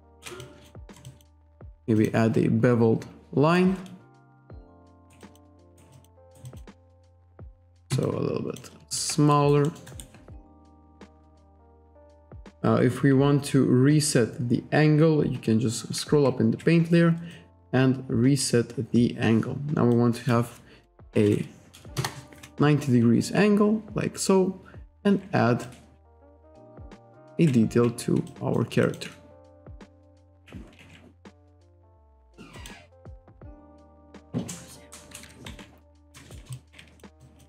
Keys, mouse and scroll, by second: 0.4 alt+click, 0.8 alt+middle click, 1.1 alt+click, 2.0 click, 3.6 click, 5.0 alt+right click, 5.2 alt+click, 5.6 alt+right click, 6.3 alt+right click, 6.5 alt+click, 6.9 ctrl+right click, 8.0 alt+click, 8.9 alt+shift+click, 9.3 alt+right click, 9.7 alt+middle click, 9.9 alt+right click, 12.2-13.5 scroll up 3, 13.8-14.8 scroll up 2, 17.3 click, 19.9 click, 20.9-21.8 typing, 22.0 Return, 24.9 click, 25.7 alt+click, 26.5 alt+click, 27.3 ctrl+z, 28.3 alt+click, 28.9 alt+shift+click, 29.9 click, 32.6 click, 33.3 alt+click, 35.2 KP_5, 35.5 1, 36.2 alt+right click, 36.5 alt+click, 37.2 alt+click.